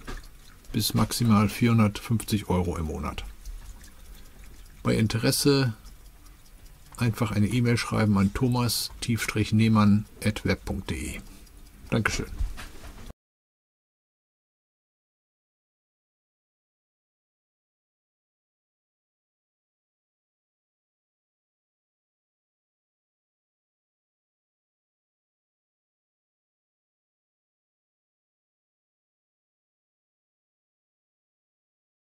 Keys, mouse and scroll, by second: 0.5 click, 1.2 ctrl+v, 2.8 click, 4.2 click, 5.2 click, 6.3 click, 7.5 click, 8.6 click, 10.6 click, 12.2 click, 14.3 click, 15.6 click, 16.5 click, 17.9 click, 18.1 click, 21.0 click, 22.9 click, 24.5 click, 25.7 right click, 26.9 click, 29.1 click, 29.8 space, 31.0 click.